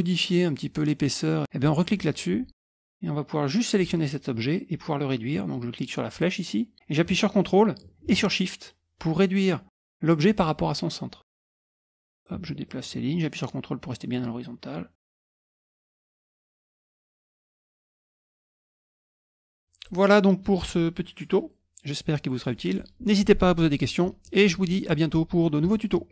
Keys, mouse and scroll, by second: 2.3 click, 2.8-3.9 drag, 6.2-11.9 drag, 12.0 click, 12.2-16.0 ctrl+drag, 16.3 middle click, 16.4 click, 16.9-18.7 drag, 18.7 click, 18.8 ctrl+scroll down 2, 19.2 click, 19.3 middle click, 19.5 click, 19.8 click.